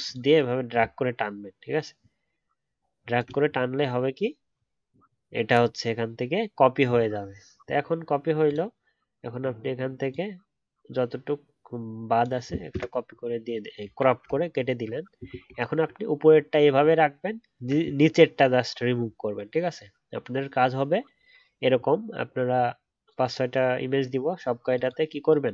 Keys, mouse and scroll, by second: 0.1 alt+double click, 5.2-5.8 alt+scroll up 1, 14.2 alt+scroll down 6, 14.5-15.8 alt+scroll up 1, 15.8-16.3 alt+scroll up 1.